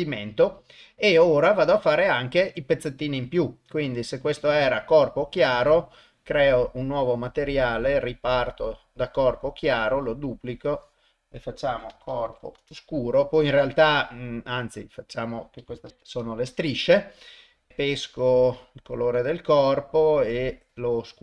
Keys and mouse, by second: 1.8 click, 3.2 click, 4.4 click, 6.8 click, 7.6-8.8 drag, 9.6 click, 10.0-12.6 drag, 14.3-16.4 drag, 17.7 click, 19.8 click.